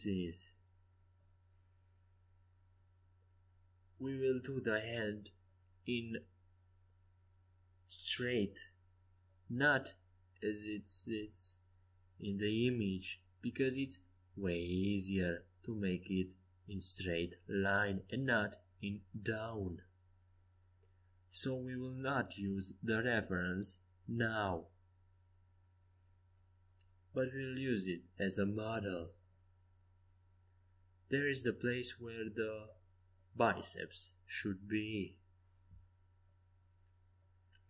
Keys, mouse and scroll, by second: 5.0 s, 8.8 e, 12.7 g, 16.5 g, 22.4 s, 23.7 middle click, 26.7-28.6 drag, 28.6 a, 29.0 c, 32.0 g, 33.5 a, 34.1 c.